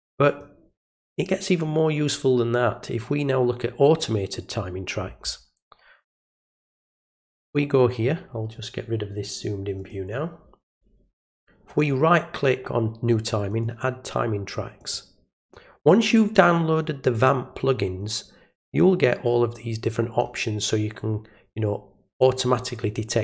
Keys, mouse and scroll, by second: 0.2 click, 6.0 right click, 9.7 click, 11.6 right click, 13.5 click, 14.8 click, 18.7-20.2 drag.